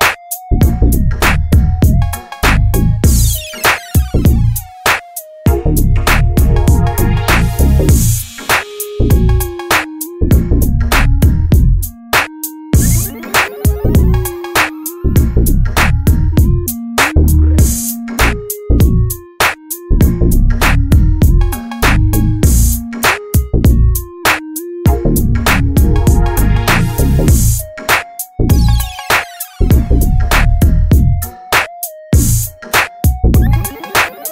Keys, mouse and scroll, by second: 1.7-5.1 drag, 8.4 right click, 9.1 click, 11.1-13.0 drag, 19.4 right click, 22.0-23.3 drag, 26.0-27.2 drag, 34.0 Right.